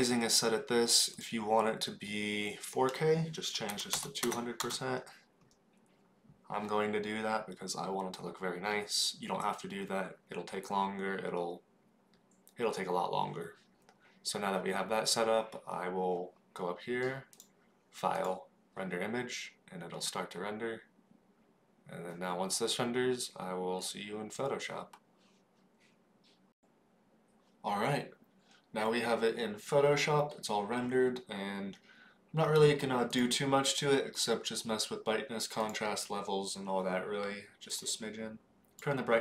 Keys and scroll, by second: 4.2 KP_0.